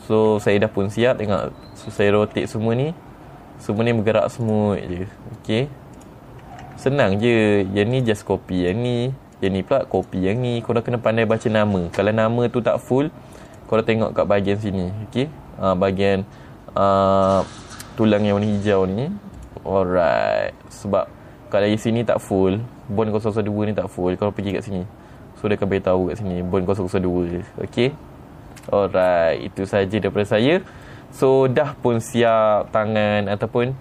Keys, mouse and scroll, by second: 0.7 r, 1.9 right click, 2.5 click, 2.9 r, 4.3 right click, 5.0 click, 5.3 r, 5.9 right click, 6.5 click, 7.0 r, 7.8 right click, 8.5 click, 9.1 click, 9.9 click, 10.5 click, 14.0 click, 19.9 click, 24.9 click, 29.1 middle click, 29.1 scroll up 2, 29.6 middle click, 29.6-30.3 scroll down 2, 30.3-31.4 middle drag.